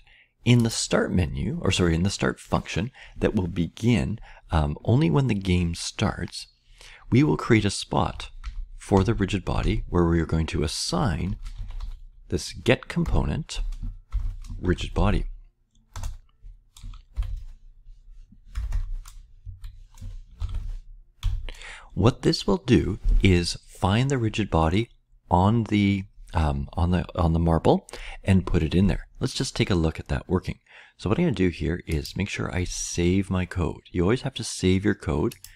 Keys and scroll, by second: 8.0 typing, 9.5 typing, 10.9-12.2 typing, 13.0 Return, 13.8-18.6 typing, 19.4 Right, 20.8-21.5 typing.